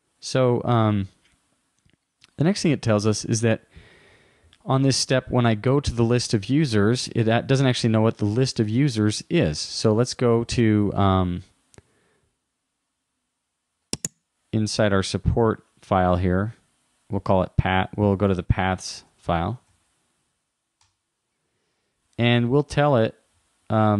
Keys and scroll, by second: 10.1 super+Tab, 19.1 super+t.